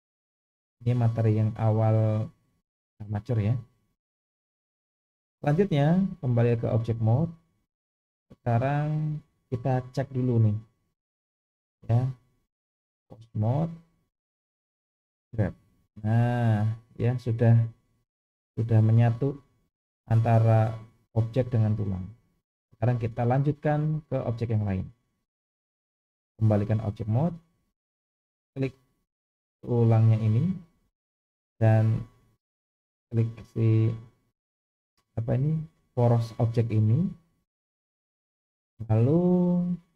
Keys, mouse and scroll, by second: 3.9-5.1 middle drag, 6.1-6.6 drag, 8.1 click, 9.2 click, 11.3 click, 13.1-13.7 drag, 15.2 g, 26.1-26.9 drag, 28.3 click, 29.2-30.6 middle drag, 31.2-31.7 middle drag, 33.4 shift+click, 34.4-34.8 scroll up 2, 34.9-35.3 shift+middle drag, 36.3-38.6 middle drag.